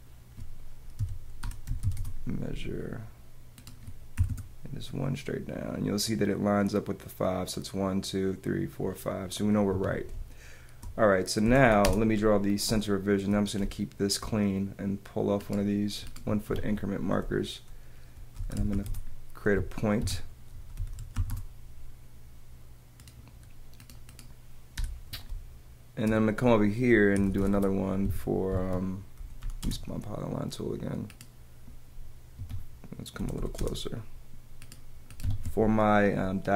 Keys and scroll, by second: 1.0 d, 2.1 Return, 2.9 Return, 4.2 |, 4.3 Home, 5.3 Home, 9.7 Escape, 10.7 space, 11.4 p, 12.9 space, 13.8 space, 16.5 Escape, 18.1 p, 19.8 Return, 20.0 Escape, 20.8 o, 21.3 Return, 22.3 Return, 24.8 BackSpace, 25.9 space, 27.2 c, 27.5 Return, 28.5 Return, 28.5 Escape, 28.6 Escape, 30.5 space, 32.4 Escape, 34.5 space, 35.2 Escape.